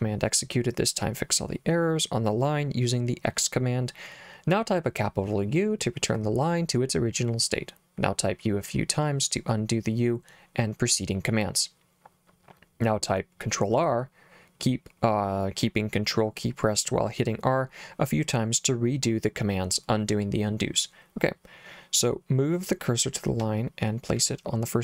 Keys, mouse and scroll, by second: 23.5 l.